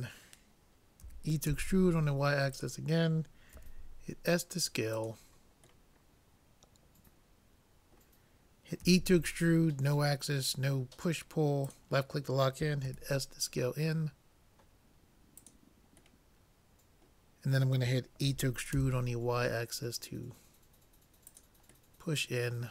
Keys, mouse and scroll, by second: 1.0 e, 3.6 s, 5.9 middle click, 8.9 e, 12.9 s, 16.2-18.2 middle drag, 18.3 e, 22.1 middle click.